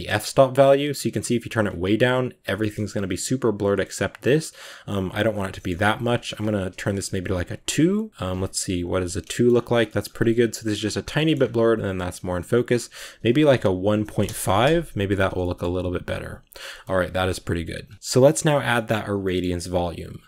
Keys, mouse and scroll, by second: 0.0 scroll down 1, 2.4-2.8 shift+middle drag, 2.8-8.3 scroll up 5, 8.3 click, 9.1 shift+middle click, 9.3-9.7 shift+scroll up 4, 9.7 shift+middle drag, 10.6-11.0 scroll down 10, 11.0 shift+middle drag, 11.2-11.8 scroll up 2, 11.8-12.7 scroll down 4, 14.1-15.3 drag, 15.3 shift+middle click, 15.8 ctrl+s, 16.1 scroll down 1, 16.3 drag, 16.6 shift+middle click, 16.7-17.8 scroll up 1, 17.9 z, 18.3 scroll down 2, 18.6-18.9 middle drag, 18.9 scroll down 1, 19.1-20.2 middle drag.